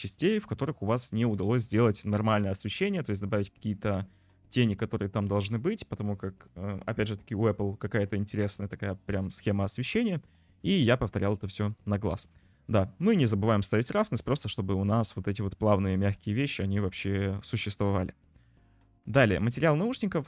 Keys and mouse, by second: 12.2 click, 17.1 ctrl+s, 19.2 click, 19.8 click.